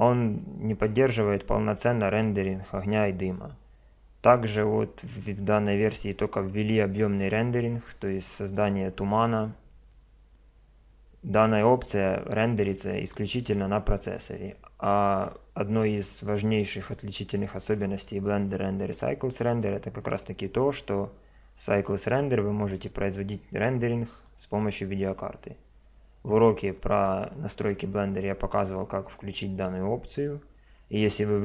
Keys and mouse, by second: 16.8 click, 24.1 click, 29.6 click.